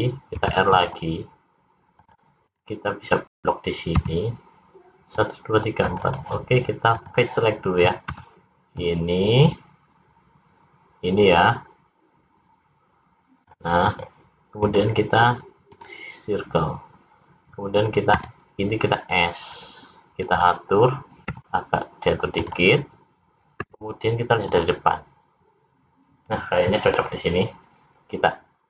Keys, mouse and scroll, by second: 0.4 ctrl+r, 0.4 scroll up 1, 4.0 c, 7.0 click, 8.1 c, 14.6 right click, 18.1 s, 21.3 r, 23.6 `.